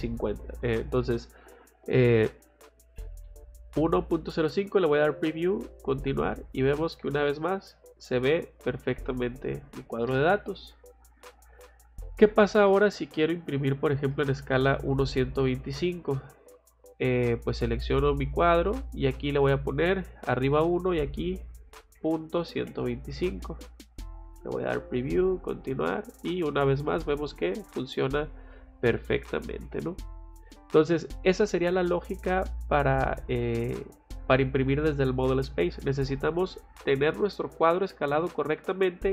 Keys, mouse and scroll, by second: 2.1 click, 4.6 click, 5.7 click, 10.4 Escape, 12.7 click, 13.2 scroll down 2, 14.1 middle click, 14.5 scroll up 2, 16.6 click, 17.8 click, 18.8 click, 24.2 click, 25.2 click, 29.6 Escape.